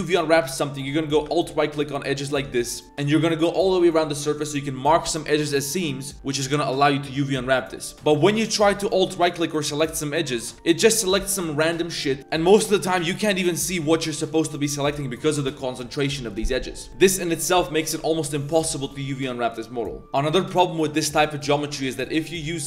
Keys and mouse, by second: 0.0-0.3 drag, 0.5 click, 1.0 middle click, 1.7 alt+click, 2.1 alt+click, 2.8 middle click, 2.8 z, 3.2 middle click, 3.5 z, 4.3 middle drag, 7.6 click, 10.2 alt+shift+click, 10.5 z, 11.0 click, 11.9 click, 12.2 ctrl+z, 12.2 ctrl+click, 13.0 alt+shift+click, 14.2 shift+drag, 15.3 click, 16.3 drag, 16.8 click, 16.9 a, 17.7 drag, 18.2 click, 18.7 click, 20.7 Tab, 21.3 Tab, 22.1-22.6 drag.